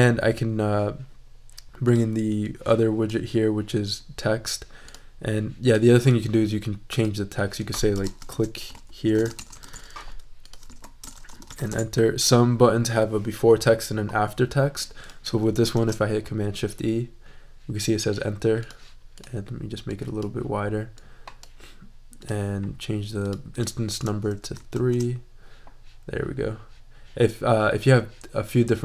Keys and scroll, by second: 8.1-10.1 typing, 10.6 super+e, 11.0 shift+super+a, 11.1 shift+super+e, 11.3 shift+n, 11.5 r, 11.7 Return, 15.7 shift+super+e, 24.7 shift+super+e.